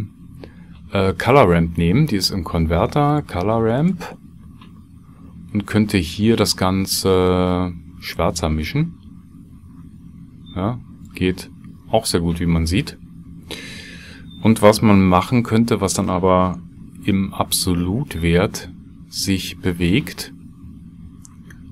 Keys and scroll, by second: 16.6 ctrl+x, 17.7 shift+a.